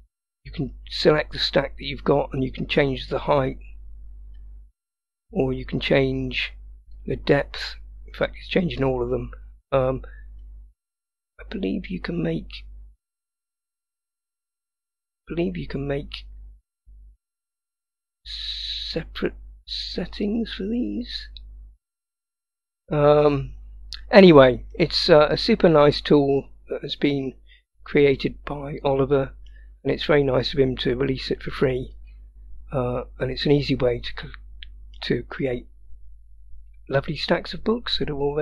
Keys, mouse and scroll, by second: 0.7 click, 2.2-4.4 drag, 5.3 click, 7.0-10.6 drag, 17.4-20.1 drag, 20.3 click, 24.1-24.8 scroll down 2, 24.8-27.2 middle drag, 27.6-28.2 scroll down 1, 28.2-29.6 middle drag, 31.2 click, 32.5-33.3 scroll up 3, 33.3-35.0 middle drag.